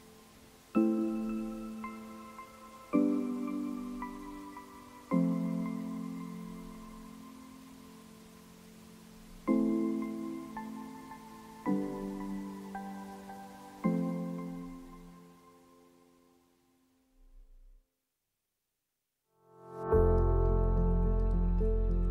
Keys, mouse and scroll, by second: 0.3-2.6 drag, 2.6 scroll down 2, 2.9 t, 3.0 scroll up 1, 3.3 shift+click, 3.8 scroll down 1, 4.1-7.3 shift+drag, 8.8-12.7 drag, 12.8 scroll down 2, 12.9 middle click, 13.0 g, 13.4 middle click, 13.6 g, 15.7 click, 15.8 middle click, 15.9 g, 16.3 r, 16.4 g, 16.8 middle click, 17.0 g, 17.5 middle drag, 17.8 scroll down 1, 18.0 middle click, 18.0 r, 18.3 middle click, 19.0 click, 20.1-21.5 drag, 21.8 middle click, 22.0 scroll up 1, 22.0 middle drag.